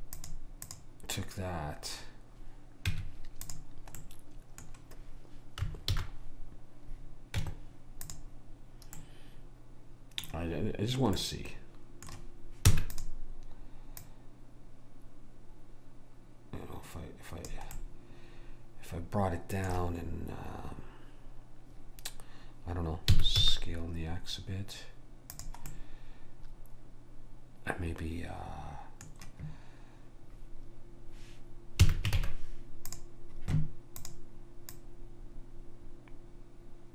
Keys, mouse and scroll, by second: 0.7 click, 2.9 Tab, 6.0 alt+h, 7.4 Tab, 9.0-10.9 middle drag, 11.2-12.7 middle drag, 12.7 e, 14.0 click, 17.8-19.5 middle drag, 23.1 s, 25.8-28.0 middle drag, 31.9 a, 32.2 ctrl+Tab, 34.0 click.